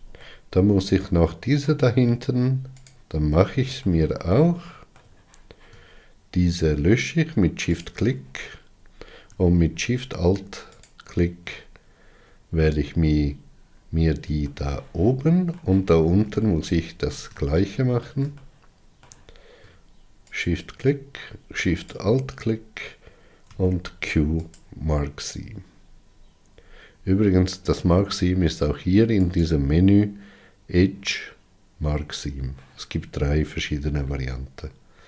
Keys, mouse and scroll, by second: 0.2-2.8 middle drag, 2.8 alt+click, 3.8-7.7 shift+middle drag, 7.7 shift+click, 8.6-9.3 scroll up 5, 10.8 alt+shift+click, 12.5 scroll down 4, 13.2-14.4 scroll down 11, 14.4-20.3 shift+middle drag, 20.3 shift+click, 21.8 alt+shift+click, 24.5 q, 25.5 scroll down 3, 26.4-27.0 scroll up 1, 30.3-33.9 drag, 33.9-34.8 scroll down 3, 34.8 scroll down 1.